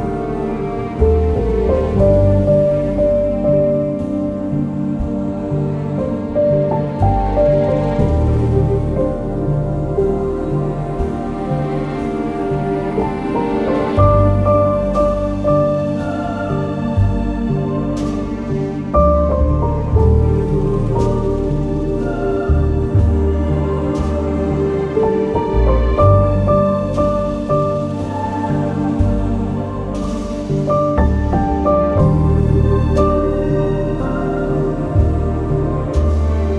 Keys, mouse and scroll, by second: 6.1 alt+click, 12.2 click, 12.5 click, 16.2 click, 16.8 click, 21.4 click, 21.4 scroll down 1, 23.7 click, 24.1 scroll down 1, 31.8-33.1 drag.